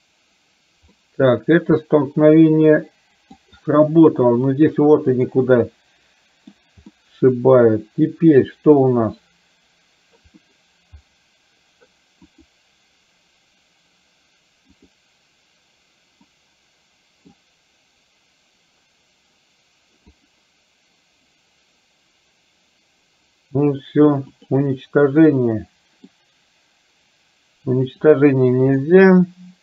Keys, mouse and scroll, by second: 0.9-3.4 middle drag, 5.3-6.5 middle drag, 7.0-8.6 middle drag, 10.6 middle click, 12.4 click, 14.9 click, 16.3 middle click, 20.2 click, 24.4 click, 25.3 middle click, 28.0 click, 28.9 middle click.